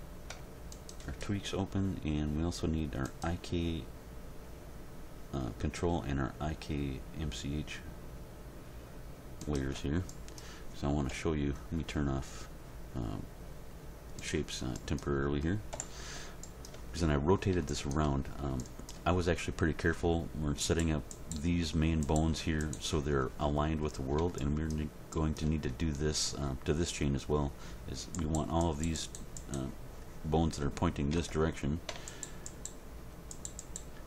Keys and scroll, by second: 11.1 End, 15.7 Home, 31.1 Tab.